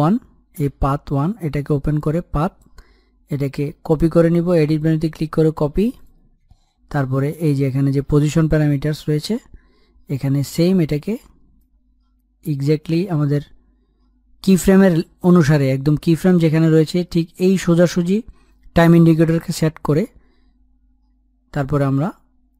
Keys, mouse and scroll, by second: 1.6 click, 6.6 click, 8.6-9.5 scroll up 1, 9.5 click, 11.6-12.0 scroll down 1, 12.0-13.5 scroll up 1, 13.5-17.8 drag.